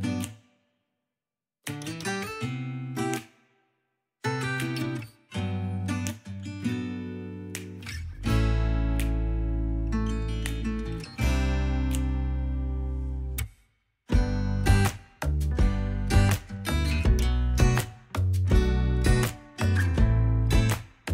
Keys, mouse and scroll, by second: 0.0 scroll down 1, 0.1 click, 0.5 shift+d, 0.8 scroll up 4, 1.0 shift+middle click, 1.2 g, 1.6 ctrl+Tab, 1.9 f, 2.0 click, 2.5 scroll up 2, 2.6 click, 2.8 ctrl+z, 3.1 ctrl+Tab, 3.3 ctrl+Tab, 3.4 scroll down 2, 3.7-5.8 drag, 5.8 scroll down 6, 6.0 shift+middle click, 6.1 alt+z, 6.2 shift+middle click, 6.3 scroll up 1, 6.5 click, 6.7 alt+z, 6.8 click, 7.5 f, 7.7 click, 8.4 f, 9.3 middle click, 9.5 scroll down 2, 9.5 middle click, 10.0 KP_3, 10.1 alt+z, 10.7 scroll up 1, 11.0 click, 11.1 f, 11.2-13.3 drag, 11.5 alt+z, 13.3 middle click, 13.5 shift+click, 14.1 middle click, 14.2 click, 14.4 middle click, 14.5 shift+click, 14.9 middle click, 15.0 click, 15.1 middle click, 15.3 KP_3, 15.5 scroll up 3, 15.5 click, 16.0 scroll down 1, 16.1 alt+z, 16.3 click, 16.6 alt+z, 16.7 click, 17.1 alt+z, 17.2 click, 17.4 alt+z, 17.5 click, 17.5 alt+z, 18.0 click, 18.1 f, 18.2 click, 18.9-19.5 scroll down 6, 19.0 middle click, 19.1 shift+click, 19.5 scroll up 4, 19.6 middle click, 19.7-21.1 shift+drag, 19.8 scroll down 1, 19.8 middle click, 20.1 scroll up 1, 20.4 middle click.